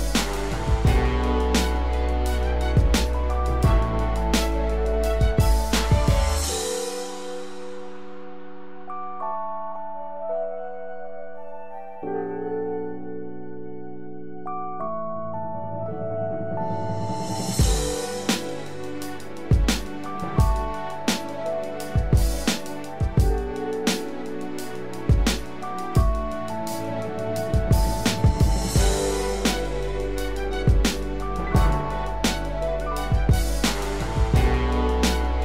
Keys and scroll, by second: 7.5 ctrl+=, 8.2 ctrl+=, 19.0 ctrl+z.